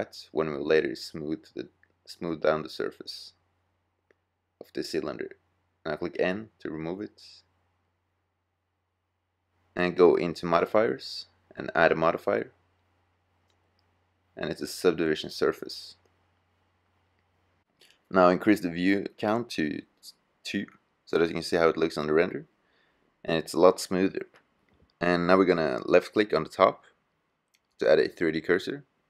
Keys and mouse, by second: 1.4 middle click, 6.0 n, 8.2-8.8 drag, 19.1 middle click, 19.8 middle click, 22.7-24.7 middle drag, 26.5-28.3 drag, 28.3-29.0 middle drag.